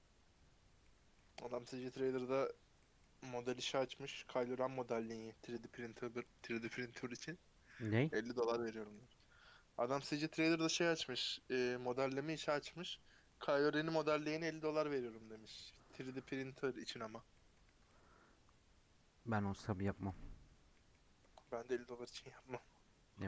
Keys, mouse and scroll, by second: 0.7 middle click, 1.3 Tab, 1.7 Tab, 6.8 click, 17.2 middle click, 17.6 Tab, 17.8-20.8 middle drag, 20.8-21.6 scroll up 6, 21.1 middle click, 21.6 Tab, 22.1 Tab, 22.5 Tab, 23.2 middle click.